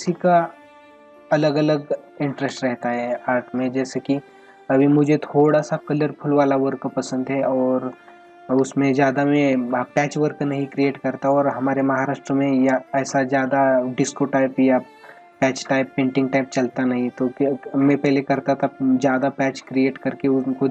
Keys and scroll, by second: 4.2 ctrl+-, 5.5 space, 7.0 ctrl+-, 8.0 space.